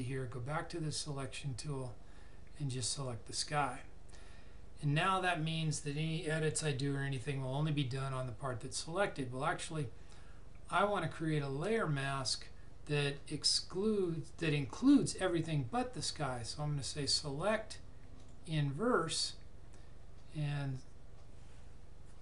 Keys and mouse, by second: 1.0 click, 16.8 click.